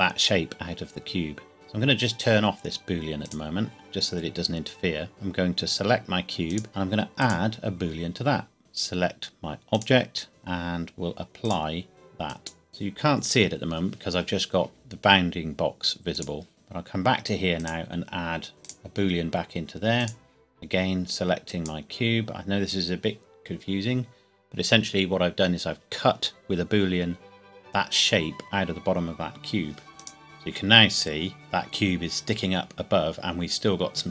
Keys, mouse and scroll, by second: 3.2 click, 6.5 click, 9.7 click, 11.4 click, 13.4 scroll up 1, 16.1 click, 18.6 click, 29.9 click, 30.6 scroll down 1.